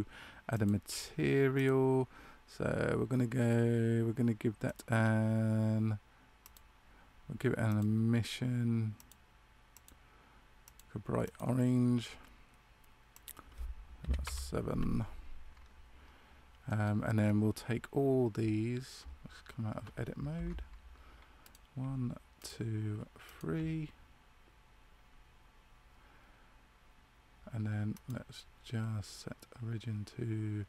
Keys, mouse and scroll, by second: 0.5 click, 4.6 click, 13.1 click, 16.6 middle click, 17.1-17.5 scroll down 1, 19.7 scroll down 2, 21.4 right click, 22.3 shift+right click, 27.9 click.